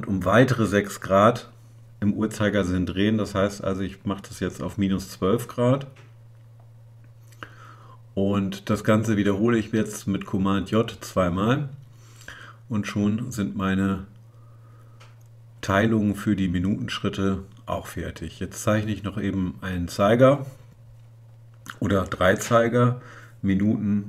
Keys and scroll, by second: 0.1 super+j, 8.9 super+j.